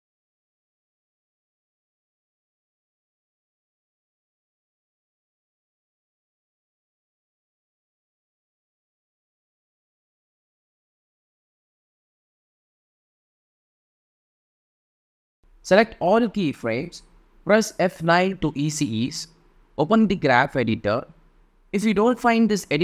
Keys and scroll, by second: 16.6 F9, 17.9 =.